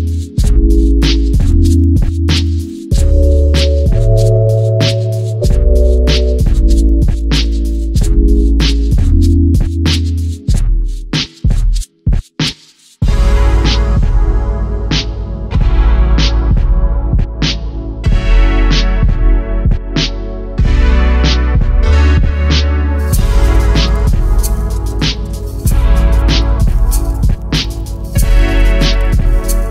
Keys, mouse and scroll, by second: 1.0 click, 1.2-2.4 middle drag, 2.1 shift+z, 2.4 click, 2.7-6.6 middle drag, 3.1 scroll down 1, 4.4-4.8 scroll up 1, 6.6 click, 7.5 KP_2, 7.7 KP_3, 8.1-8.5 scroll up 1, 8.5-10.6 shift+middle drag, 9.6 z, 10.0 Tab, 10.6 click, 11.7 g, 13.0 click, 13.8 g, 15.3 click, 16.1 g, 17.0 click, 17.6 g, 18.4 click, 18.9 g, 19.9 click, 20.3 g, 21.1 click, 21.5 g, 22.6 click, 23.0 g, 24.1 click, 24.2 g, 26.6 click, 26.8 scroll down 1, 27.2 Tab, 27.6 shift+z, 27.8 click, 28.1-29.7 middle drag.